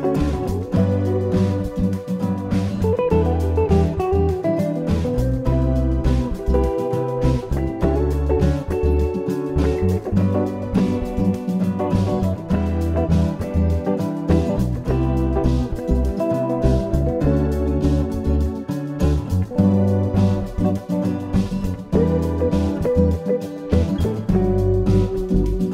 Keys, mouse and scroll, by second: 4.1-6.5 scroll up 2, 6.5-7.3 scroll down 2, 7.3-7.9 scroll up 1, 7.9 scroll down 1, 8.0-8.8 scroll down 1, 8.8-9.5 scroll down 2, 9.5 middle click, 15.7-16.2 scroll up 1, 16.2-18.2 scroll up 1, 18.2 shift+a, 22.0 s.